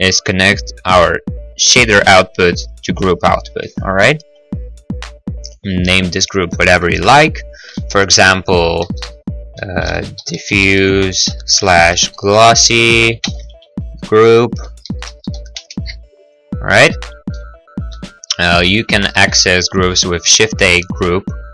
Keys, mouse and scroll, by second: 4.3 Tab, 6.1 click, 9.0-15.4 typing, 15.5 Return, 16.8-17.5 scroll, 17.3 middle click, 17.5 middle click, 18.0-18.4 scroll, 18.0 g, 18.5 click, 18.5 click, 19.3 shift+a, 20.7 g.